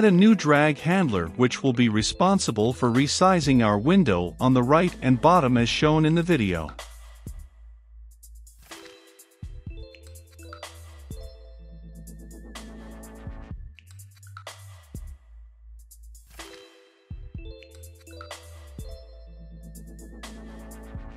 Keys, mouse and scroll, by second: 0.5 Return, 1.1-15.5 typing, 5.6 click, 7.8 Return, 9.4 Return, 10.7 Return, 11.7 Return, 17.9 space, 19.2-21.1 typing.